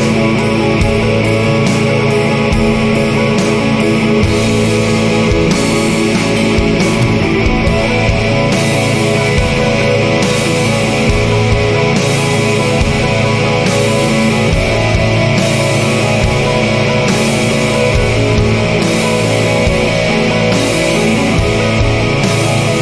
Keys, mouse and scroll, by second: 19.8-20.2 scroll down 2, 20.3-21.3 scroll up 4, 22.2 0.